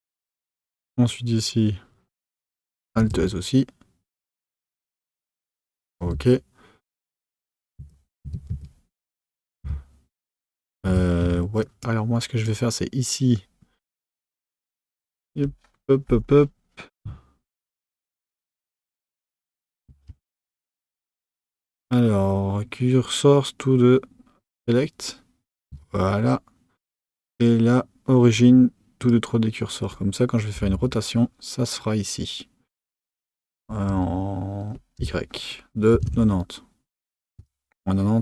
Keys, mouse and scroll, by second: 0.4 click, 3.0 alt+s, 6.1 Tab, 7.8 1, 8.3 Tab, 8.5 1, 9.6 Tab, 10.9 Tab, 11.2 1, 11.6 click, 12.4-20.1 right drag, 20.1 shift+s, 25.6 Tab, 27.0-38.2 right drag.